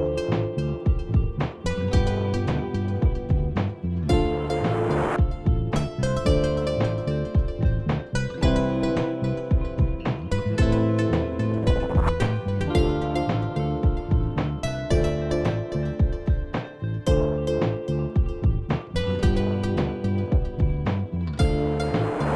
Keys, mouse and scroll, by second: 0.0 click, 0.8 [, 1.1 click, 1.6 click, 2.1 ], 2.3 click, 2.3 ], 2.4 click, 3.5 click, 4.2-4.9 scroll up 3, 4.9 scroll up 4, 6.0 click, 6.3 click, 6.6-7.6 scroll down 11, 7.6-8.0 scroll down 2, 9.9 click, 12.2 click, 13.6 click, 14.5 right click, 15.7 click, 19.8 click, 20.7 click, 21.7 click.